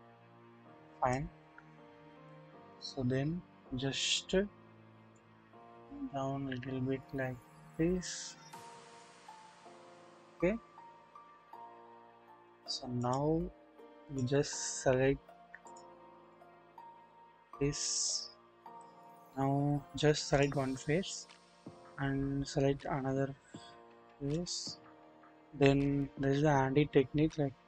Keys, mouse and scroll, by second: 1.6-2.2 scroll down 1, 2.2 click, 2.7 KP_1, 3.1-5.1 scroll up 1, 5.1 click, 5.3-9.1 drag, 9.7-10.3 scroll up 1, 10.3-12.6 drag, 10.3-12.0 scroll down 1, 14.0 click, 15.6-16.3 drag, 17.1-18.9 drag, 19.8-20.4 scroll up 1, 22.5 scroll up 1, 24.3 shift+click.